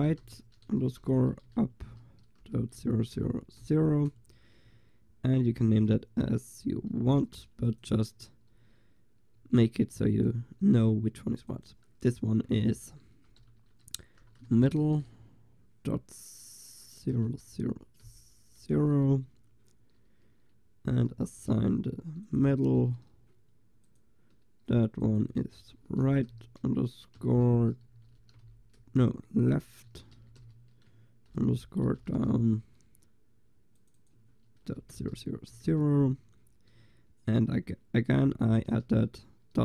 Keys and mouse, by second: 6.8 l, 7.7 click, 8.6 a, 9.5 a, 10.4-13.0 drag, 14.8 t, 16.3-18.2 drag, 21.2 l, 22.3-27.0 drag, 33.8-35.2 drag, 35.2 0, 36.8 a, 38.4 l.